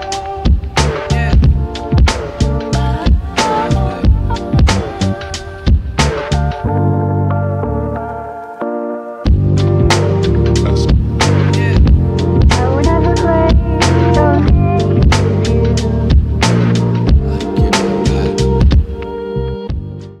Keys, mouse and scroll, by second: 1.4 click, 3.7-4.0 scroll up 1, 11.5 scroll down 1, 11.6-12.6 typing, 12.4-20.2 right drag, 18.7 typing.